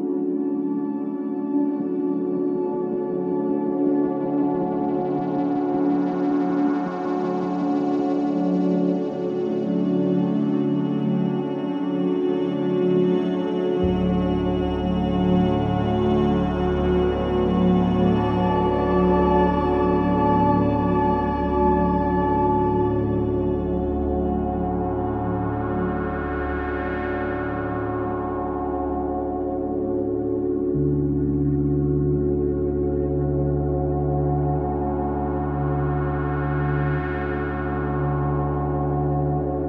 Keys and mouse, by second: 0.0-0.6 typing, 0.2-3.0 drag, 2.4 typing, 3.7 typing, 4.0-7.1 drag, 6.5 typing, 8.6 space, 9.1-13.3 drag, 12.8-14.4 typing, 16.0 typing, 17.5 typing, 21.1-23.6 drag, 23.3 space, 24.4 space, 24.9-27.6 drag, 27.4-27.9 typing, 27.8-29.7 drag, 29.8 Delete, 31.2 Delete, 31.7 click, 32.2 Delete, 33.1-35.5 drag, 36.2-36.9 drag, 37.3-38.4 drag, 37.9-38.8 typing.